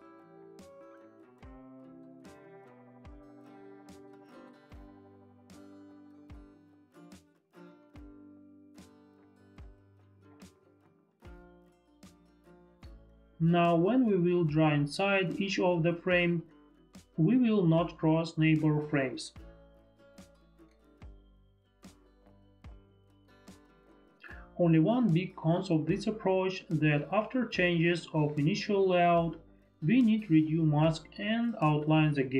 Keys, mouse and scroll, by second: 1.3 click, 3.1 click, 5.4 click, 6.7 ctrl+d, 6.8 click, 7.4 click, 8.4 ctrl+d, 8.7 click, 9.9 click, 10.3 ctrl+d, 10.3 click, 11.0 click, 18.2 click, 19.5 ctrl+click, 22.1 ctrl+click, 22.9 ctrl+click, 24.3 ctrl+z, 24.3 ctrl+click.